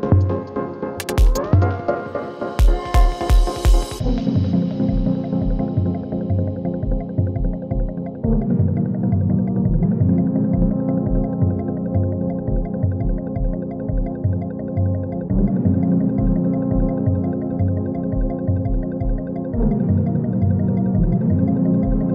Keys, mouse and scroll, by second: 6.8 shift+click, 7.9 ctrl+alt+Home, 9.3 p, 12.3 s, 13.0 click, 13.2 space, 14.9 click, 15.2 j, 16.1 click, 16.8 Return, 17.5-18.2 click, 18.3 F9, 19.0 click, 19.5 =, 20.4-22.1 drag.